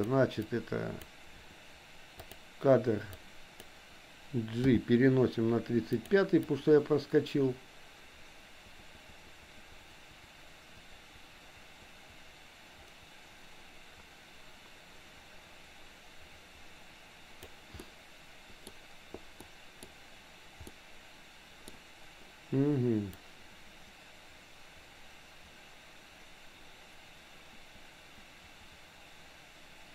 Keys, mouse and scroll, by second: 0.5 click, 2.2 click, 3.2 click, 4.7 g, 6.5-17.6 drag, 17.8 middle click, 19.5 middle click, 20.8 middle click, 23.3-29.9 drag.